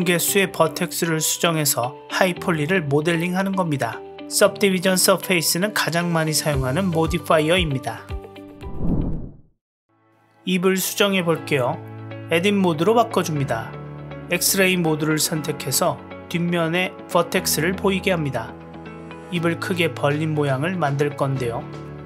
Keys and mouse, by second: 0.7 click, 2.5 g, 9.4 Tab, 10.5 click, 12.0 KP_Decimal, 13.4 click, 14.0-15.4 middle drag, 16.0 click, 16.3-17.9 middle drag, 18.6 click, 19.9-22.0 middle drag.